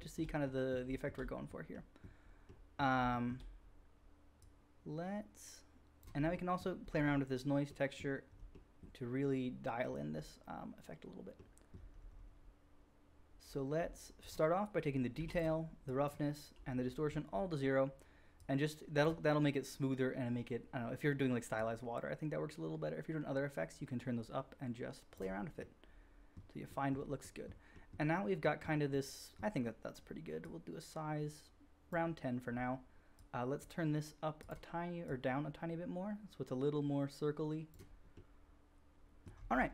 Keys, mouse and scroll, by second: 15.8-34.4 middle drag, 34.4 click, 35.0-39.7 middle drag.